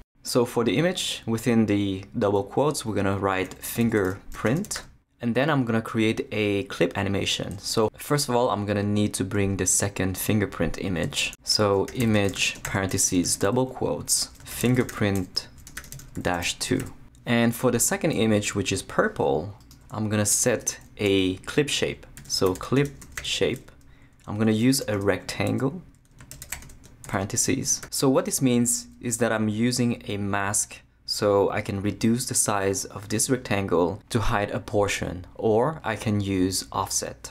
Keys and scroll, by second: 3.3-5.2 typing, 8.7 Return, 11.8-16.8 typing, 20.3 Return, 20.6 Tab, 21.9-27.5 typing.